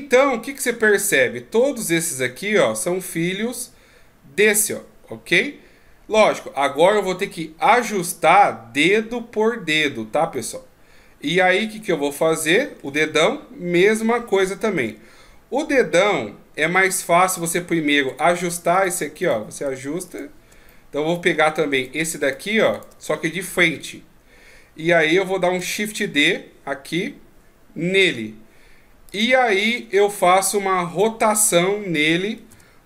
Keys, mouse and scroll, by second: 1.0 right click, 1.7 g, 10.3 middle click, 13.8 KP_3, 14.8 KP_1, 17.3 right click, 18.1 right click, 18.7 right click, 19.2 right click, 20.1 shift+right click, 20.7 middle click, 21.7 right click, 22.3 shift+right click, 22.7 shift+right click, 23.6 KP_1, 25.7 shift+d, 32.3 r.